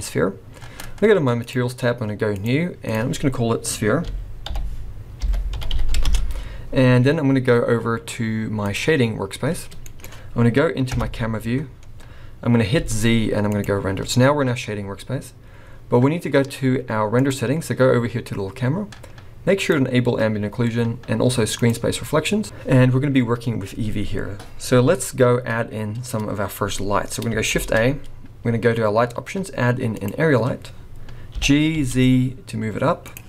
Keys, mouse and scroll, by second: 1.4 click, 2.3 click, 2.8 click.